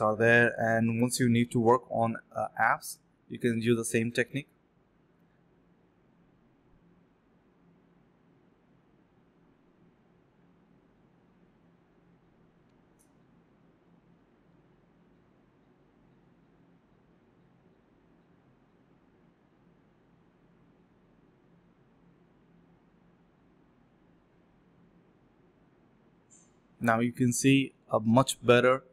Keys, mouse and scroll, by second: 1.0 alt+click, 1.4 alt+click, 2.8 typing, 5.7 alt+click, 6.3 alt+click, 7.4 alt+click, 8.4 typing, 8.7 alt+click, 9.2 shift+click, 9.3 shift+double click, 9.4 shift+click, 9.8 typing, 10.0 shift+click, 10.1 shift+double click, 10.1 shift+click, 10.8 alt+click, 12.4 alt+click, 14.3 typing, 15.8 double click, 16.9 typing, 18.0 double click, 18.6 d, 19.2 alt+click, 19.4 alt+click, 20.8 alt+click, 21.0 alt+click, 21.2 alt+click, 21.6 scroll down 1, 22.0 middle click, 22.1 scroll up 1, 22.3 scroll down 1, 22.6 middle click, 24.1-24.5 scroll up 1, 24.7 scroll down 1, 24.8 middle click, 26.1 alt+click, 26.5 alt+click, 26.6 alt+double click, 27.7 ctrl+b, 27.9 typing, 28.7 double click.